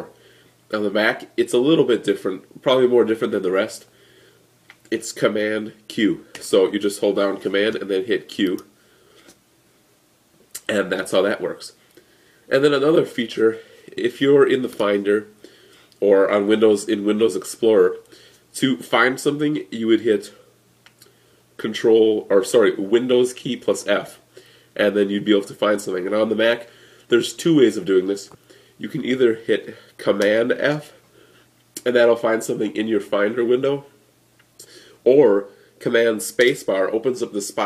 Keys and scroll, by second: 6.2 super+q, 30.4 super+f, 36.2 super+space.